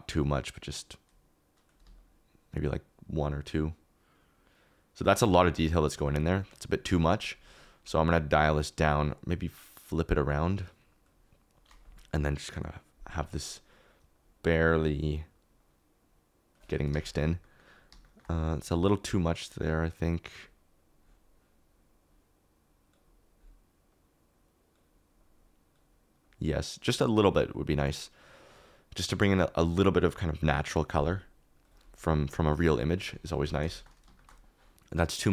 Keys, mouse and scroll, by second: 1.7-2.9 shift+middle drag, 16.7 middle click, 17.1 middle click, 17.4 middle click, 18.0 shift+click, 19.3 click, 22.7 click, 24.3 click, 25.1-26.2 drag, 26.3-27.3 drag, 28.1 click, 29.8 click, 31.1 click, 33.4 shift+middle click.